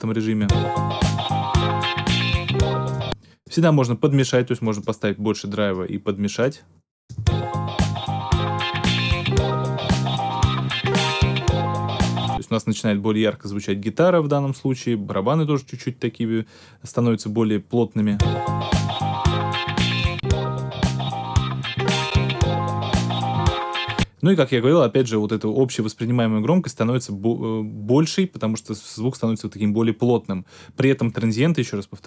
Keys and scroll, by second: 0.3 space, 2.9 space, 7.1 space, 12.1 space, 18.0 space, 23.8 space.